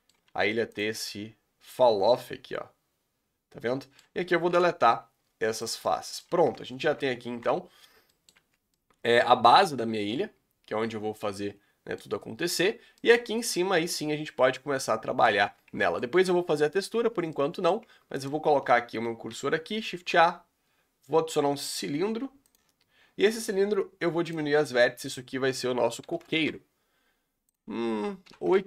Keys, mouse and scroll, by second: 0.2 s, 0.8-5.6 middle drag, 5.6 Delete, 5.8-6.9 middle drag, 6.9 z, 7.1 z, 7.9 scroll down 2, 8.1 middle click, 8.4 Tab, 8.5 scroll up 3, 8.8-11.8 middle drag, 12.2-12.7 scroll up 5, 13.0-14.1 middle drag, 14.1-14.7 scroll up 2, 14.7-15.4 middle drag, 15.4 scroll down 3, 15.9-16.4 shift+middle drag, 16.4 Tab, 16.6 scroll up 3, 17.0 Tab, 17.3-18.3 middle drag, 22.9 scroll up 3, 26.4-28.6 drag.